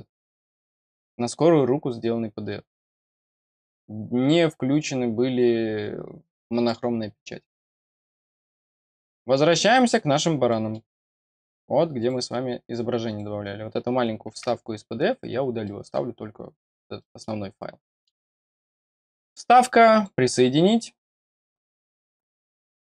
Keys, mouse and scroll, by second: 3.2 click, 6.5 click, 7.8 click, 9.1-9.9 scroll down 1, 9.9-10.5 scroll down 1, 10.5 middle click, 11.0 scroll up 1, 11.6-12.0 scroll up 1, 12.0 click, 13.1 click, 14.8-15.4 scroll down 2, 15.6 middle click, 16.0 scroll down 1, 17.0 middle click, 17.4 scroll up 1, 17.8 middle click, 19.1 click, 19.9 click.